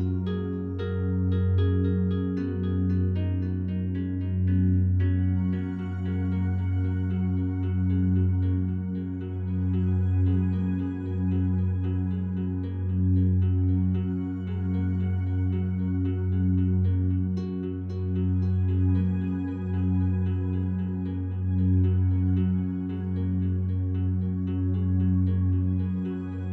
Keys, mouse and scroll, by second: 3.0 s, 3.5 z, 5.3 right click, 10.2 s, 11.8 y, 12.9 Return, 13.7 a, 14.4 a, 14.6-19.4 alt+drag, 19.6 right click, 20.5 3, 20.8 right click, 21.9-23.6 alt+drag, 23.6 shift+right click, 24.2-26.3 alt+drag.